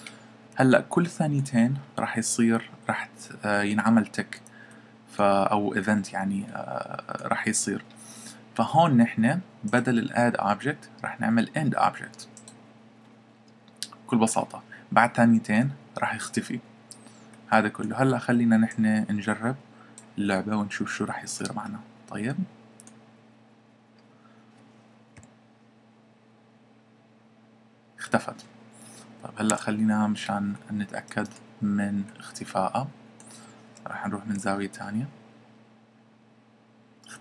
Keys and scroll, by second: 25.2 p, 29.5 Escape, 34.2 p.